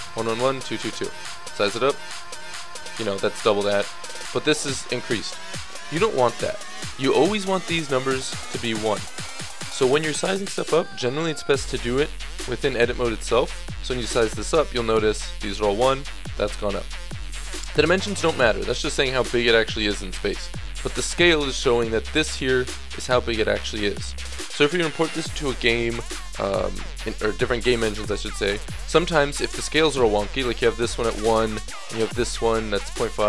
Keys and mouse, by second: 1.2 s, 3.8 click, 8.9 ctrl+z, 11.3 Tab, 13.6 s, 14.5 Tab, 19.7-30.8 middle drag, 30.8 shift+d, 31.9 s.